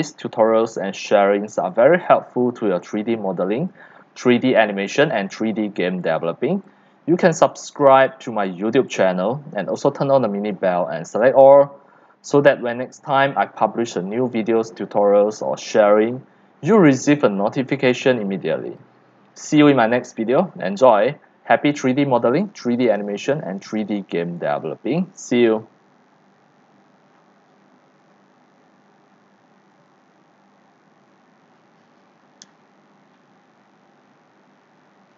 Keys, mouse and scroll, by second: 0.6 click, 1.6 x, 2.1-3.3 c, 3.5 c, 3.7 click, 4.2-5.0 scroll down 1, 4.8-8.2 typing, 6.2 click, 6.3 click, 8.3 right click, 8.5 middle click, 8.8 click, 9.3 right click, 9.6 x, 10.1 c, 10.6 c, 10.7 click, 11.2-11.7 scroll down 2, 12.4 scroll, 12.6-13.7 drag, 13.7 scroll down 1, 13.8-14.3 scroll down 1, 14.3 scroll, 14.6-21.2 typing, 15.9 click, 17.9 click, 18.2-18.7 scroll down 11, 19.4 click, 21.0 click, 26.0 scroll, 27.3 scroll, 28.1 click, 30.0 click, 34.8 c.